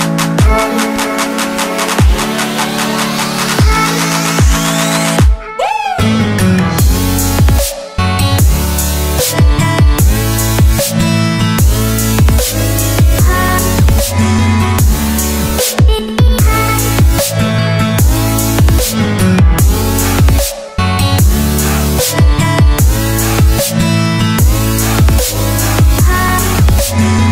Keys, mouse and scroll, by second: 0.6 click, 3.1 ctrl+c, 4.1 click, 5.0 ctrl+v, 6.6 ctrl+t, 6.8 alt+scroll down 1, 7.2 click, 8.7 ctrl+0, 9.0 click, 13.0 Return, 14.4 click, 14.9-15.3 scroll down 1, 15.3 click, 20.4 Delete, 24.8 click, 25.3 t, 25.7 click.